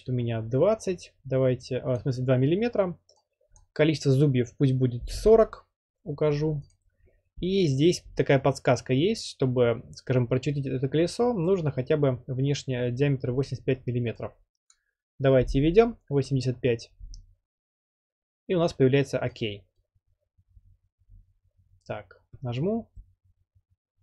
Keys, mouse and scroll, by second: 2.0-3.0 drag, 3.6 click, 4.9-5.6 typing, 6.7 click, 14.7 click, 15.4-15.8 typing, 19.4 click.